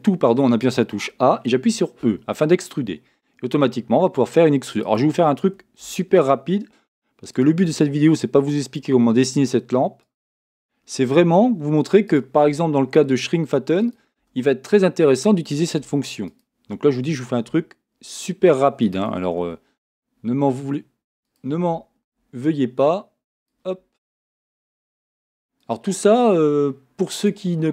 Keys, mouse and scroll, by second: 2.0 e, 5.0-6.9 drag, 5.8 e, 7.6 e, 8.9 e, 10.3 e, 12.5 e, 14.2 e, 15.8 e, 16.4-18.1 drag, 17.5 e, 19.4 e, 22.0 e, 24.3 e, 25.9 e.